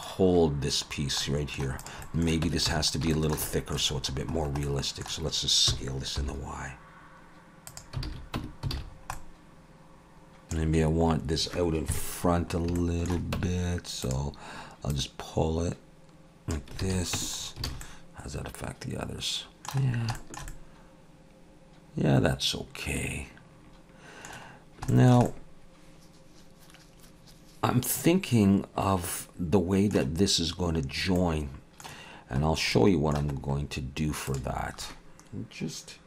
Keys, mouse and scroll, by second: 1.0 scroll down 2, 1.3 middle click, 1.8 click, 2.0 middle click, 2.5 Tab, 2.7 a, 3.1 shift+middle click, 3.5 middle click, 4.0-5.0 scroll up 4, 4.6 middle click, 5.7 s, 8.1 alt+a, 8.4 Tab, 8.7 alt+a, 8.9-10.0 scroll down 3, 9.1 middle click, 10.4 click, 10.4-11.9 scroll down 2, 11.9 KP_3, 12.5 scroll up 3, 12.8 shift+middle click, 13.4 Tab, 14.0 click, 14.9 click, 16.8 alt+a, 17.2 Tab, 17.4 scroll down 4, 17.7 alt+a, 17.8 middle click, 19.9 scroll down 2, 20.2 shift+middle click, 20.5 middle click, 24.6 scroll down 1, 24.9 shift+middle click, 25.3 middle click, 31.2 middle click, 32.5 scroll down 2, 32.7 middle click, 33.3-34.2 scroll up 1, 34.2 scroll up 2, 34.3 click.